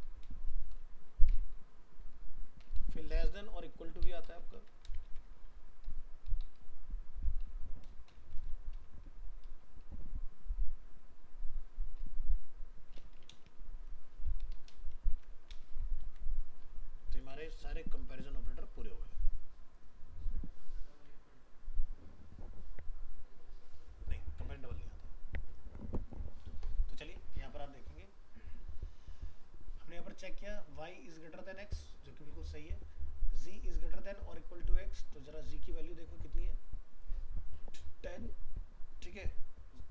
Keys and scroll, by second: 4.6 ctrl+c, 5.0 ctrl+Return, 5.0 ctrl+v, 16.0 ctrl+s.